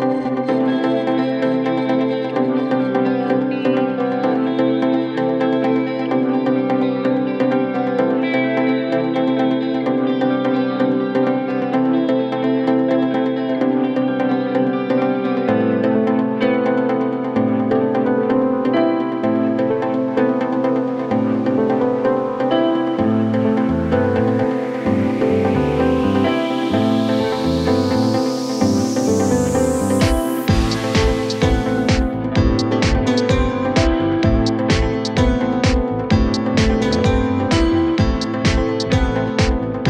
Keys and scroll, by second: 1.7 shift+Page_Down, 2.5 Escape.